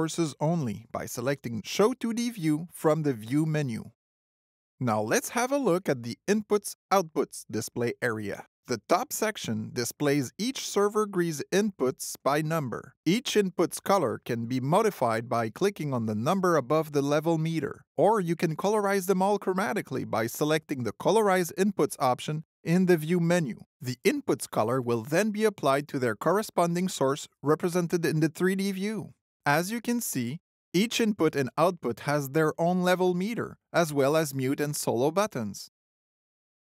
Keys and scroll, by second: 19.5 alt+c, 20.4 alt+c.